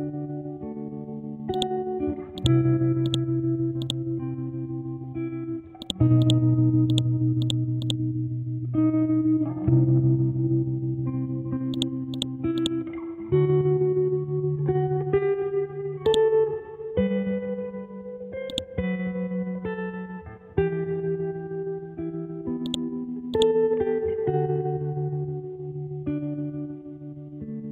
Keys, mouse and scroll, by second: 1.5 click, 4.5-5.1 scroll down 1, 5.8 click, 7.8 right click, 11.7 click, 16.0-22.6 drag.